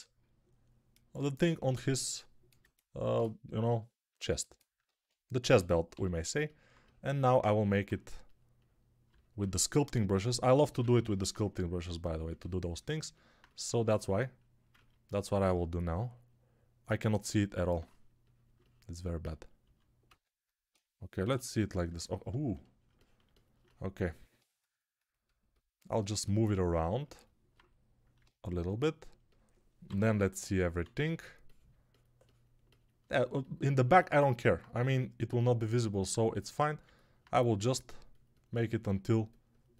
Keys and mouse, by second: 3.5 g, 4.6-7.3 ctrl+middle drag, 4.7 ctrl+Tab, 5.8 g, 13.5 alt+z, 14.6-23.9 ctrl+alt+drag, 19.5 alt+z, 21.1 /, 29.8 /, 30.7 alt+z, 37.1-39.7 drag.